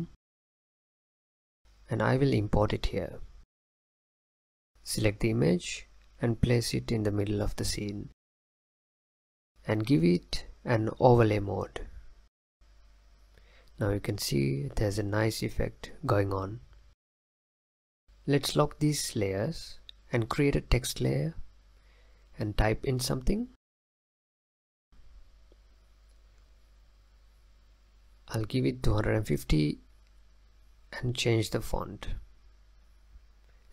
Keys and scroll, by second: 21.5-24.6 typing, 26.8-28.0 typing.